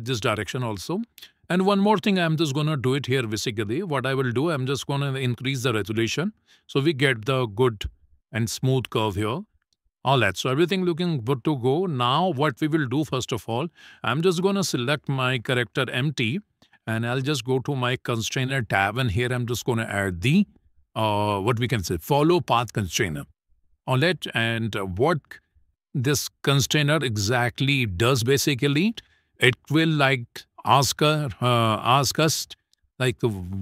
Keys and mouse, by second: 1.0 Tab, 2.3 shift+middle click, 5.1-6.4 drag, 6.9 click, 9.4 shift+middle click, 10.4 middle click, 12.1 shift+middle click, 12.9 shift+middle click, 13.6 middle click, 14.4 shift+middle click, 15.9 click, 18.3 click, 19.1-23.3 drag.